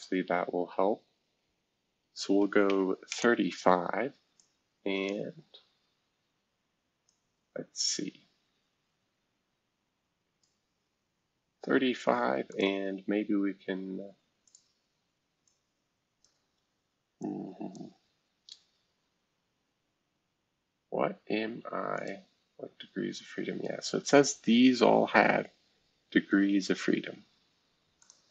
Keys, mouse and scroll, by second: 2.4 typing, 3.1 Return, 4.3-5.4 drag, 5.4-6.8 scroll down 1, 6.8 scroll down 1, 7.0 click, 8.4-9.3 scroll down 2, 9.3-11.2 scroll down 1, 12.5 click, 14.4 click, 15.4 click, 17.2 click, 19.4 scroll down 3, 20.9 scroll up 2, 21.9 click, 25.0 scroll down 2, 27.0-28.0 scroll down 6, 28.0 click.